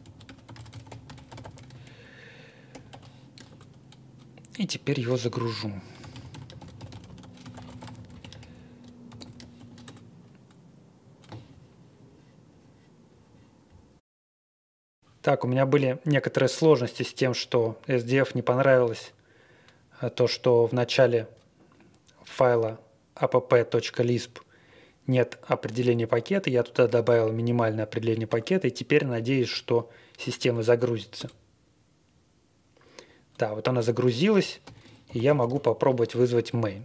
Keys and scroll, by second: 0.0-1.4 typing, 2.4-3.4 typing, 3.5 Return, 5.3-10.0 typing, 31.2 Return, 34.6-36.0 typing.